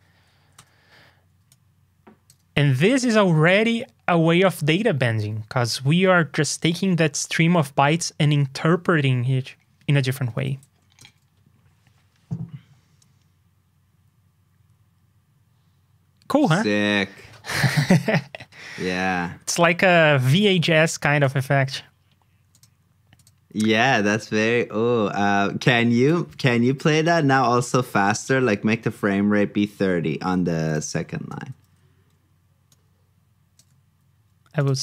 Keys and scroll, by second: 2.5 super+c, 10.3 super+v, 29.9 super+z.